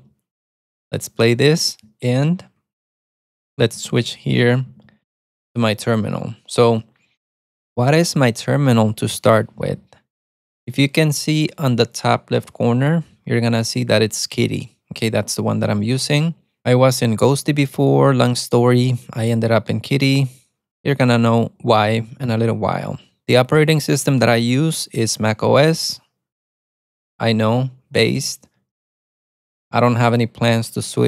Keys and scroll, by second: 2.6 ctrl+b, 2.8-5.6 typing.